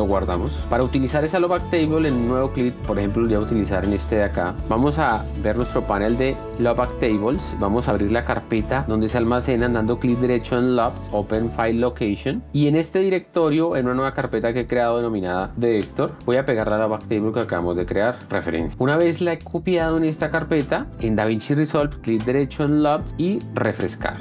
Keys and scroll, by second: 11.9 F1, 19.4-20.1 typing.